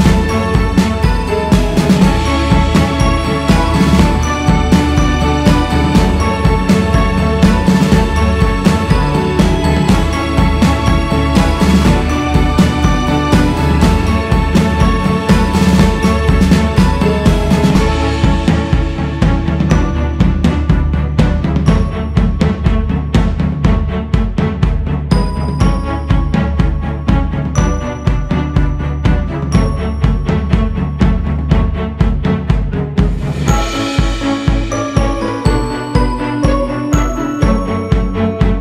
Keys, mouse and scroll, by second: 2.0-2.5 scroll down 2, 2.5-3.2 scroll up 2, 3.3-4.1 scroll up 3, 4.2-5.5 scroll down 1, 5.5-8.4 drag, 8.4 scroll down 3, 9.1-9.9 scroll down 2, 10.1 g, 10.3 f, 11.8-17.4 drag, 17.4-18.4 scroll up 3, 18.4-19.6 drag, 19.6-20.1 scroll down 2, 20.1 shift+s, 20.4-20.8 scroll up 2, 20.8-27.8 drag, 27.8 shift+c, 28.2 f, 30.7-37.6 drag, 37.6 shift+s, 38.0 f.